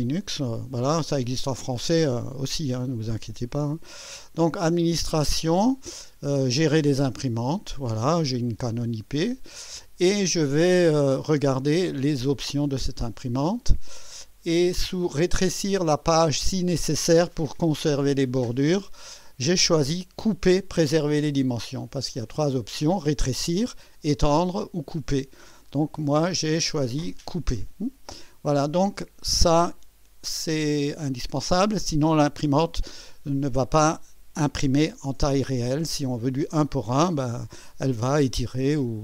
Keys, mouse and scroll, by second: 4.5 click, 7.1 click, 8.7 click, 11.0 click, 12.7 click, 13.6-14.9 scroll down 5, 22.1 click, 27.1 click.